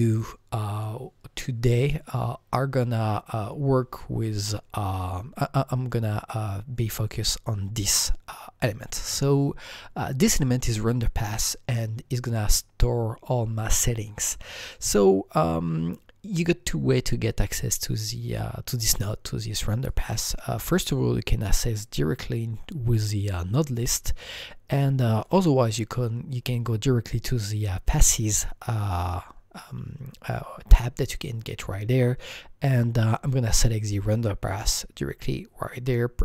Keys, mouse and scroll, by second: 0.1 click, 0.8 click, 19.9 click, 25.2 click, 34.6 click.